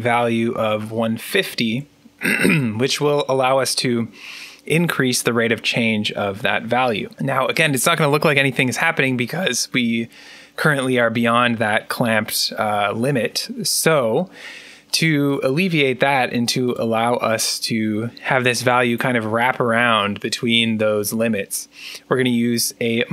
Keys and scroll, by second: 0.5-2.5 typing.